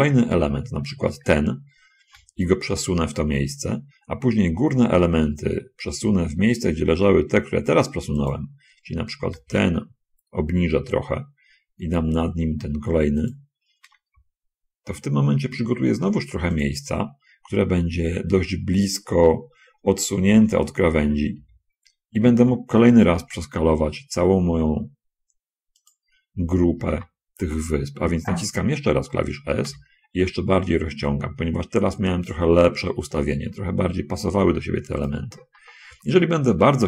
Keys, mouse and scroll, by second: 0.7 l, 2.4 g, 8.5 click, 9.5 l, 9.8 g, 13.2 click, 14.2 l, 14.4 g, 16.9 click, 18.6 l, 20.6 shift+l, 21.3 shift+l, 21.7 shift+l, 23.4 g, 26.1 click, 26.5 a, 27.1 a, 29.6 s, 35.4 click.